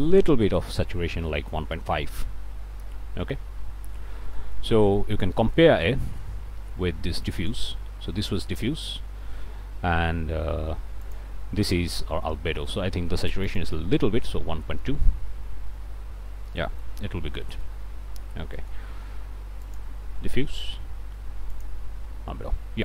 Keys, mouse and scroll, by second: 0.5 5, 1.0 Return, 4.4 click, 4.7 scroll down 1, 5.1 scroll up 1, 5.3 click, 7.4 ctrl+shift+click, 11.0 ctrl+shift+click, 12.6-13.2 ctrl+shift+scroll up 1, 13.5 click, 13.9 1, 14.2 ., 14.6 2, 15.4 Return, 16.5 click, 17.0-17.3 scroll down 1, 17.4 click, 18.3 scroll down 1, 18.6 click, 19.6 ctrl+shift+click, 21.5 ctrl+shift+click.